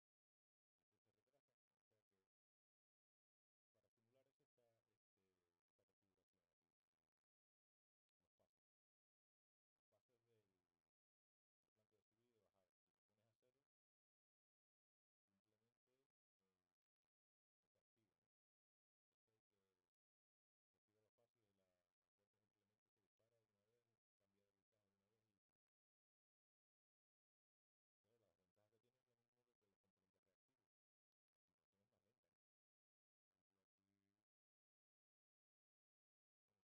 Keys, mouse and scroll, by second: 13.7 click, 14.5 BackSpace, 15.0 Return, 16.6-18.2 drag, 18.4 click, 19.2 click.